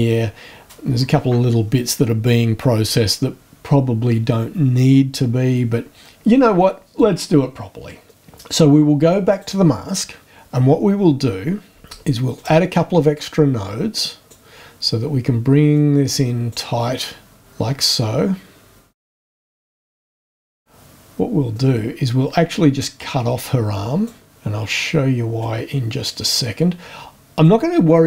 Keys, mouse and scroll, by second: 9.3 click, 12.3 ctrl+click, 13.1-14.5 drag, 15.7 click, 17.4-18.9 drag, 19.1 click, 19.3 click, 19.7 click, 19.9 click, 20.2 click, 21.5-24.2 drag, 25.4-27.7 drag.